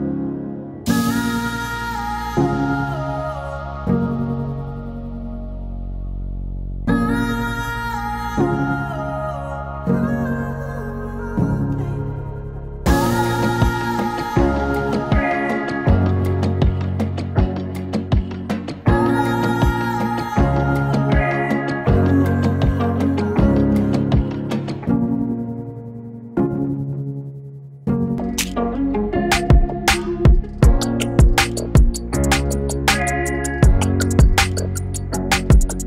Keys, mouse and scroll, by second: 5.7 ctrl+d, 7.3 click, 9.6 click, 11.8 click, 14.7-17.0 drag, 17.0-17.4 scroll, 17.4-18.3 scroll down 1, 20.1 click, 21.0-22.6 drag, 23.7-24.4 typing, 29.0-31.7 drag, 34.2-35.8 drag.